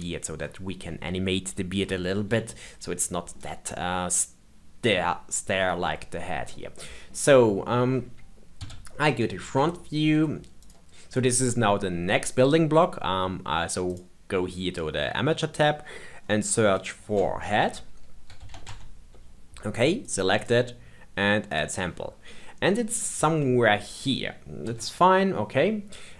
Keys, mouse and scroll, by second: 2.5-8.6 middle drag, 8.6 KP_1, 9.1-9.5 scroll down 2, 9.7 shift+middle click, 10.6 click, 13.8 click, 15.8-16.7 scroll down 7, 16.7-19.8 drag, 20.3 click, 21.4-22.9 drag, 22.9 scroll up 2, 23.3-24.6 shift+middle drag, 24.6 KP_3, 25.4-26.1 scroll up 2.